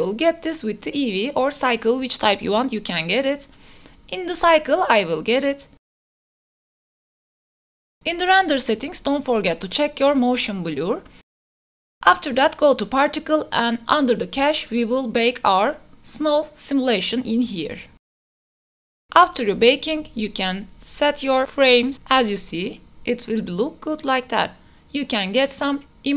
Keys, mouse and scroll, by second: 0.9-2.5 drag, 3.9 click, 4.8-6.1 middle drag, 6.1 click, 6.6-9.7 drag, 10.9-14.6 drag, 14.7 a, 14.7 space, 18.6-21.7 drag, 22.1 click, 22.3 space, 22.9 a, 23.5 a, 24.3 space, 25.5 click, 25.8 ctrl+s, 26.1 click.